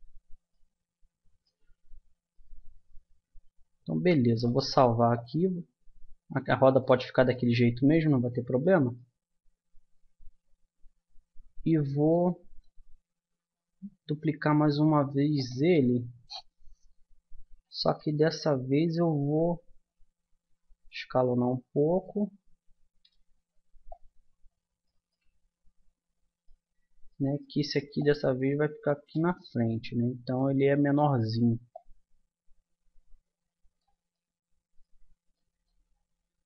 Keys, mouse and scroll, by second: 3.9 middle click, 5.1-6.9 middle drag, 7.3 middle click, 10.9-12.3 middle drag, 13.9 shift+d, 15.7-17.7 middle drag, 17.9-20.5 middle drag, 20.5 s, 23.9-25.1 drag, 25.1-29.1 middle drag, 29.3 middle click, 31.7-33.5 drag, 33.5 middle click.